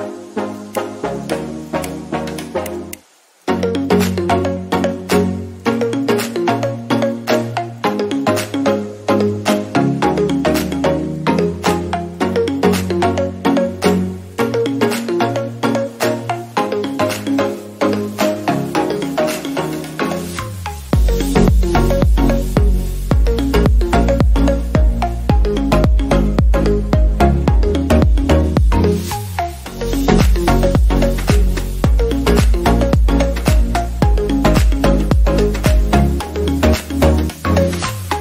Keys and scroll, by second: 14.3 ctrl+z, 15.3 ctrl+d, 28.1 ctrl+0, 34.9 alt+§.